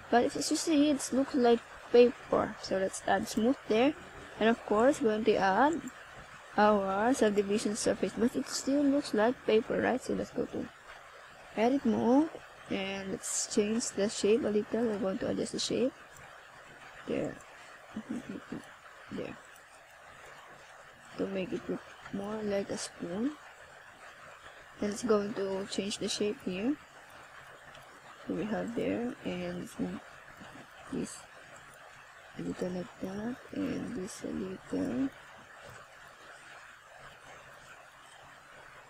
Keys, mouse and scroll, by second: 0.9 click, 7.7 right click, 8.5 right click, 9.7 click, 16.1 scroll up 1, 16.7 middle click, 19.5 shift+scroll down 1, 19.9 scroll up 2, 20.6 shift+scroll down 2, 21.0 middle click, 22.9 Tab, 23.6 a, 24.6-25.0 scroll up 1, 25.2 shift+scroll down 1, 25.7 scroll up 1, 26.3 ctrl+scroll down 2, 30.1 right click, 30.8 shift+right click, 34.1 click, 36.1 click.